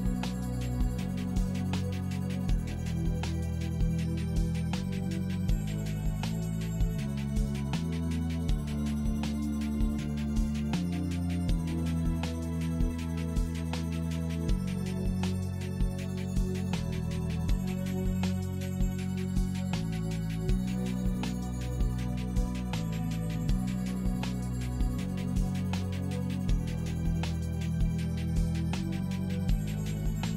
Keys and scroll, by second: 2.4 Delete, 3.2 1, 3.4 Return, 4.8 d, 5.0 e, 5.2 2.